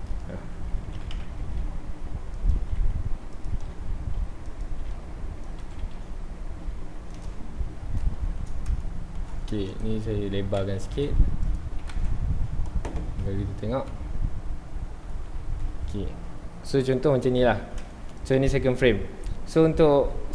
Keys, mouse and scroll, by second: 0.3 r, 1.2 KP_Enter, 1.5 g, 3.4 click, 3.6 r, 7.2 click, 7.5-8.0 scroll up 1, 8.0-8.5 shift+middle drag, 8.5 scroll down 1, 8.8-9.4 shift+middle drag, 9.4 scroll down 1, 9.7 click, 9.9 Tab, 10.1 2, 10.2 2, 10.6 a, 11.5 click, 11.6 Tab, 11.9 alt+a, 15.4 ctrl+s, 18.2 click.